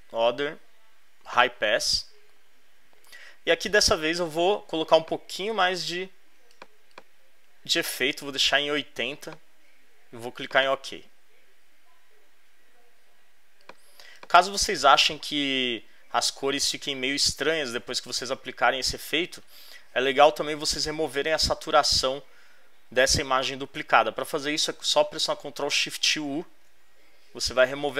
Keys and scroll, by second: 26.2 shift+super+u.